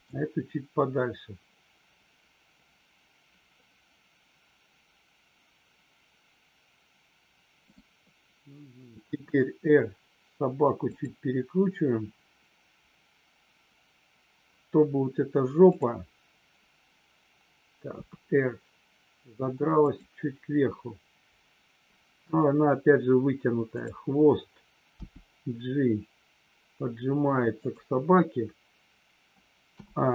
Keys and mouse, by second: 7.6-8.2 drag, 9.0 r, 17.8 r, 19.7 click, 27.6 click.